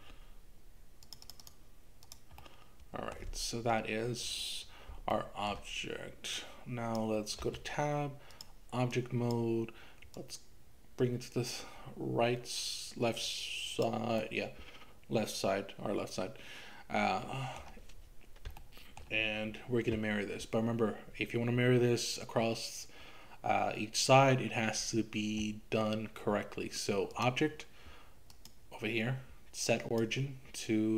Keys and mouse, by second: 1.1 click, 1.3 click, 1.5 click, 2.0 click, 2.4 middle click, 5.2 shift+middle click, 6.4 click, 7.5 Tab, 9.1 click, 10.3-13.9 drag, 14.5-17.7 middle drag, 18.6 shift+middle click, 27.1 click, 28.3-30.9 drag.